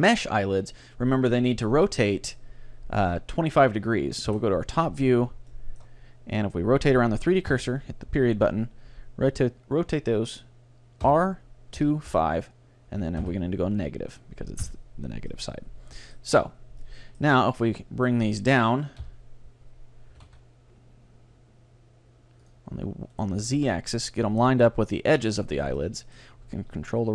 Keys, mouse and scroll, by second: 4.3 KP_7, 5.2-5.6 scroll up 1, 5.6-7.5 middle drag, 7.7 ., 11.1 r, 15.4-18.8 middle drag, 17.6-19.4 right drag, 19.0 KP_1, 20.2 g, 22.6 click, 23.2-25.0 right drag, 23.4 g, 24.0 click, 24.0 middle click, 25.2-27.0 drag, 25.6-26.8 middle drag, 25.6-27.1 right drag, 26.6 ctrl+r, 27.0 middle click.